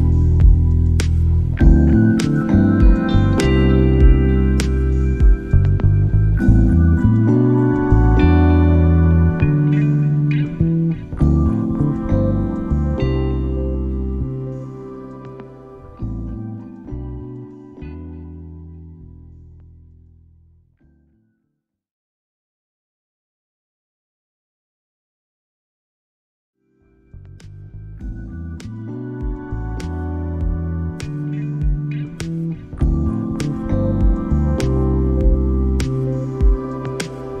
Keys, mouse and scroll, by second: 0.7 middle click, 1.1 click, 2.0 click, 2.7 click, 3.3 click, 4.1 click, 4.7-6.3 drag, 7.3 click, 8.2-9.7 drag, 15.1 middle click, 15.7-16.4 drag, 16.9-17.5 drag, 18.6-19.8 drag, 19.9-21.2 drag, 21.7-23.0 drag, 23.7-24.3 middle drag, 24.3-26.0 drag, 26.4 click, 27.0-29.7 drag, 29.8 middle click, 31.2 shift+middle click, 31.6 click, 32.4 shift+middle drag, 34.3 click.